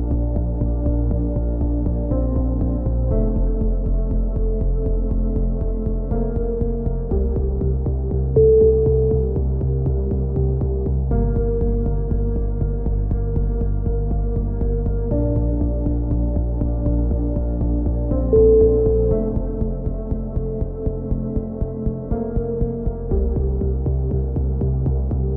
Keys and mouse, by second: 0.0 click, 1.0 KP_3, 1.8 right click, 1.8 click, 2.4 click, 3.6 click, 4.0 right click, 4.3 click, 6.0 a, 6.9 right click, 7.2 click, 8.6 a, 9.1 click, 9.7 KP_7, 10.3 click, 11.0 right click, 11.1 click, 11.9-13.9 drag, 12.1 a, 12.3 right click, 12.7 middle click, 14.3 right click, 14.5 click, 15.7 right click, 16.0 e, 16.4 click, 17.4-19.1 drag, 17.4 right click, 19.5 right click, 19.7 click, 20.6 right click, 20.8-21.8 drag, 21.9 click, 22.1 right click, 22.5 KP_3, 23.3 click.